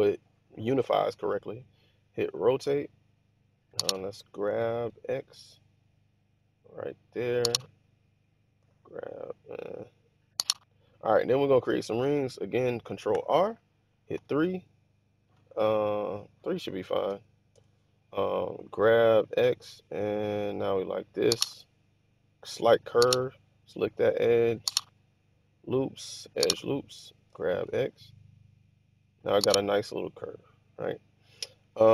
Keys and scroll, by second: 2.3 typing, 4.4-4.8 typing, 8.5 typing, 13.0 ctrl+r, 14.1 3, 17.0 Return, 17.5 Return, 18.5 g, 19.2 x, 27.2 g, 27.6 x.